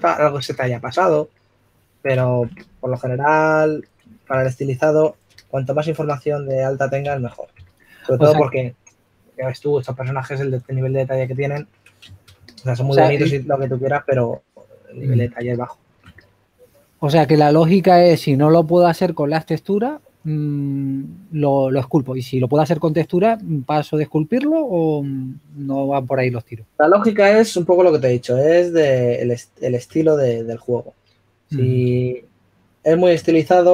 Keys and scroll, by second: 1.0 shift+f, 6.4 s, 7.8-9.2 typing, 14.6-15.4 typing, 20.2 typing, 22.7 typing, 25.2-25.8 typing.